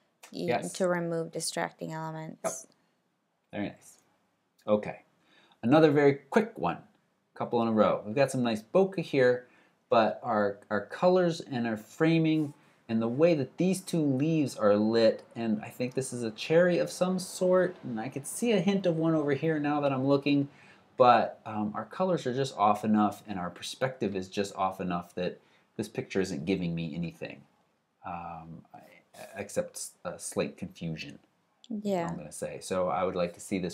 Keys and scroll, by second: 3.8 alt+super+Right.